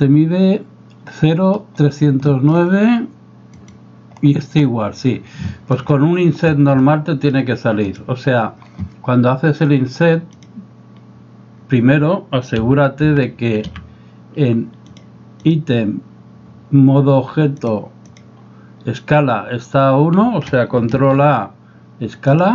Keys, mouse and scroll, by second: 2.3 shift+middle click, 3.6 right click, 5.5 shift+middle drag, 6.0-6.3 middle drag, 6.8-7.3 middle drag, 7.9 right click, 10.5 click, 12.6 n, 13.1 n, 13.8 n, 15.0 click, 15.4 click, 17.7-18.2 drag, 20.9 ctrl+a.